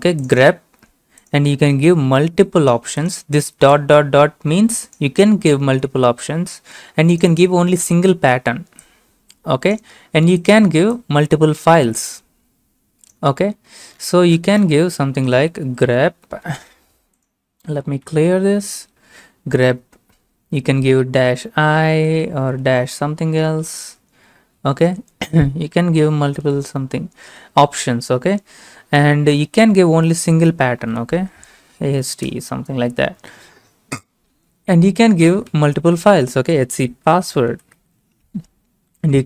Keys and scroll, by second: 15.1-16.2 typing, 18.1 ctrl+l, 18.1 typing, 19.4 space, 20.9-21.6 typing, 23.4-24.4 typing, 25.9-27.6 typing, 30.6-32.3 typing, 34.8-39.2 typing.